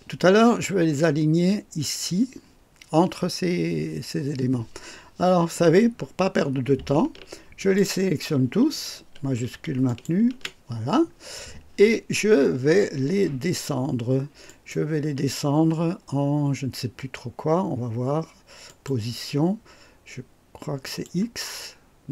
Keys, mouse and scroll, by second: 7.6 shift+click, 9.9 shift+click, 14.5 click, 18.7 click, 20.8 click, 21.5-22.0 scroll down 1.